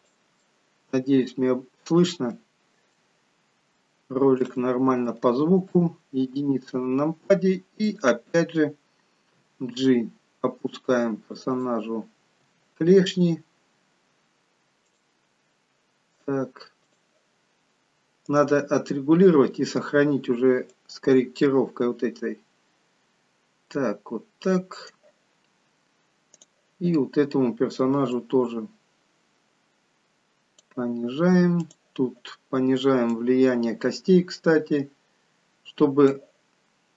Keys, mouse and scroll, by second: 1.7-2.3 scroll up 4, 2.3 shift+middle click, 2.3-3.4 scroll up 1, 3.8 shift+middle click, 4.5 middle click, 5.6 KP_1, 7.8 click, 9.4 g, 19.3 click, 19.3-20.1 scroll down 4, 20.7 click, 20.7-21.2 scroll down 1.